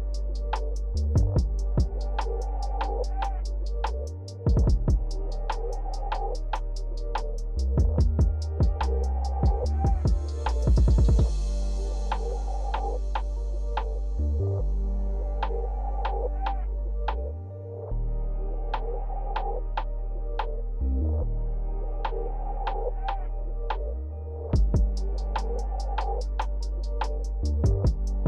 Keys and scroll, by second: 14.5 ctrl+z.